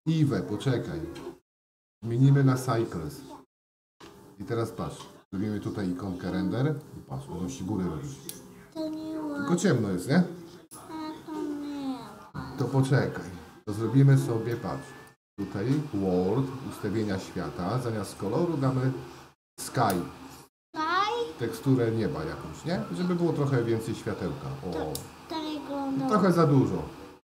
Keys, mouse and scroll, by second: 1.4-3.2 drag, 6.8 click, 21.0-23.9 drag.